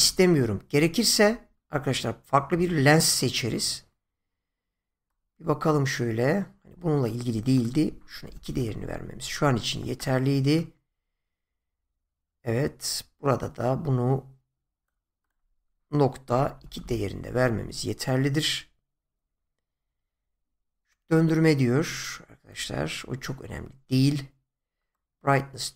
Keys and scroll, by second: 8.2 2, 8.4 Return, 16.2 typing, 16.8 Return.